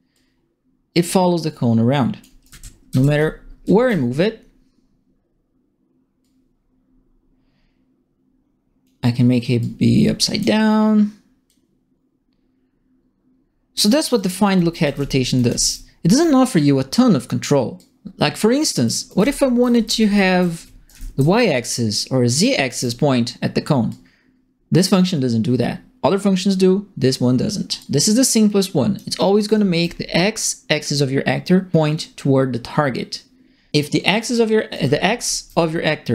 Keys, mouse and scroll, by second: 0.1-1.3 drag, 1.3 right click, 2.2-4.2 typing, 2.4-3.8 right drag, 6.2-8.8 drag, 9.6 click, 11.4-13.9 drag, 13.8-15.9 typing, 14.1-15.7 right drag, 17.7-18.8 drag, 18.9-21.4 typing, 19.0 right click, 19.9 right click, 20.8 right click, 22.4 right click, 22.5 a, 23.8 click, 27.7-28.9 drag, 29.2-30.0 typing, 29.4 right click, 34.4-35.3 typing, 34.7-36.1 right drag.